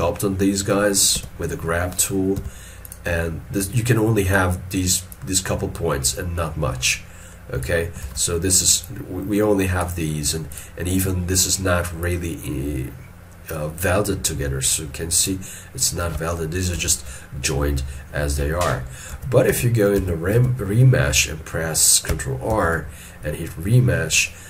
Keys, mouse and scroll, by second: 8.1 alt+e, 11.0 double click, 16.9 ctrl+z, 19.2 ctrl+z, 19.6 ctrl+z, 22.6 ctrl+r.